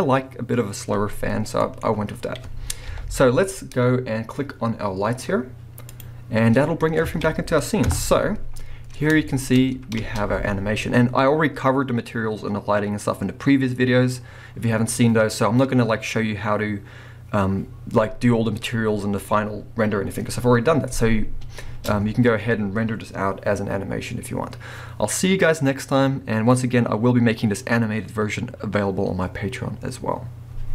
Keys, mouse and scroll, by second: 1.6 middle click, 2.8 n, 5.9 click, 6.5 scroll down 2, 6.6 middle click, 7.1 alt+a, 7.9 KP_0, 8.7-9.1 scroll down 1, 9.3 shift+middle click, 9.6-10.0 scroll up 1, 10.0 space, 21.6 space.